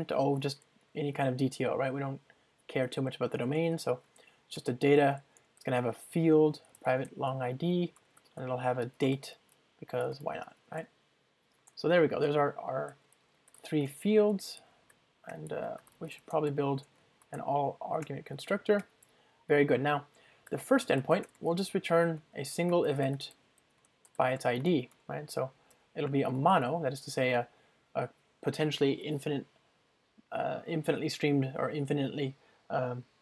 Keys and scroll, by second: 4.7 Return, 11.7 Return, 18.1 Return.